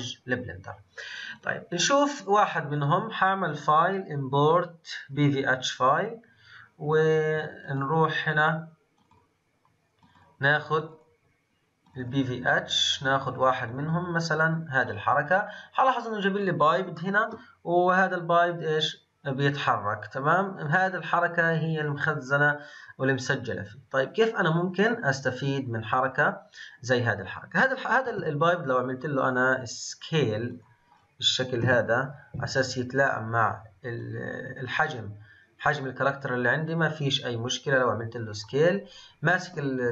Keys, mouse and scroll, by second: 1.3 click, 2.4-5.8 drag, 14.8-16.9 scroll down 12, 16.9-18.1 shift+middle drag, 18.1-21.1 drag, 30.9-31.6 scroll up 5, 31.6 KP_Decimal, 33.0-34.0 scroll down 2, 34.0-37.0 drag.